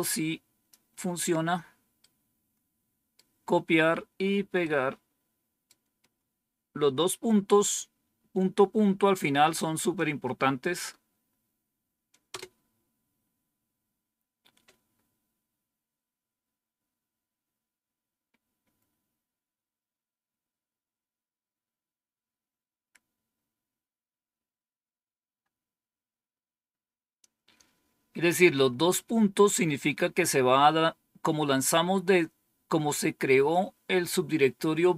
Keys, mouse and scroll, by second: 1.9-3.1 right drag, 4.5-5.6 right drag, 12.2 Return.